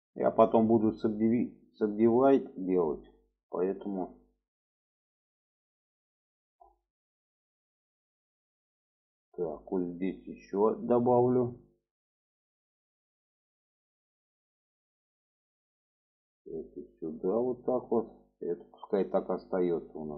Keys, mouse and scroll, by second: 0.5 drag, 1.5-2.8 drag, 3.6 shift+middle click, 4.6 click, 5.7 click, 7.0 click, 7.8-9.0 drag, 9.4 shift+middle click, 11.0 click, 12.0-13.9 drag, 16.0 click, 16.7 click, 18.8 click, 20.0-20.1 drag.